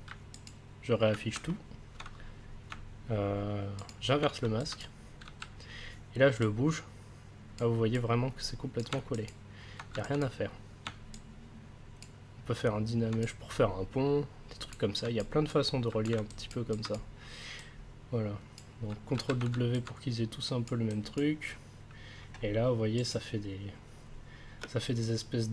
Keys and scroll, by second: 0.5 ctrl+s, 5.2 w, 19.1 ctrl+w, 24.6 space.